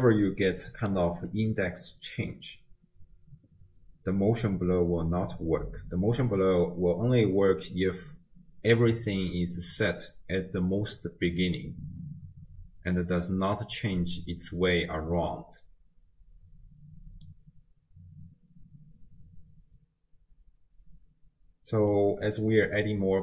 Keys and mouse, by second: 0.6 click, 22.0 click.